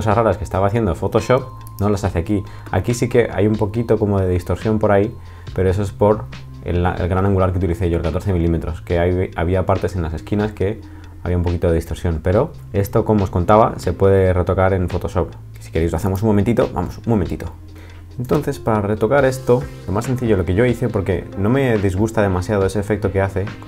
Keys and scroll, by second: 18.3 super+t, 19.7 Escape.